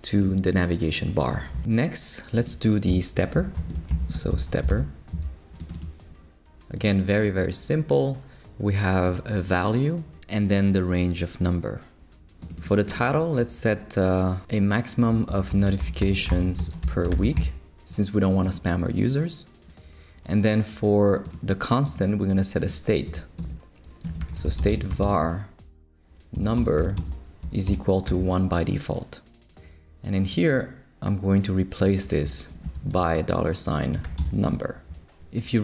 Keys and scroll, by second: 2.9 Return, 3.4 shift+super+Return, 3.5 shift+super+l, 3.9-5.2 typing, 15.0-17.8 typing, 23.1 Return, 23.8-28.1 typing, 32.7-34.7 typing.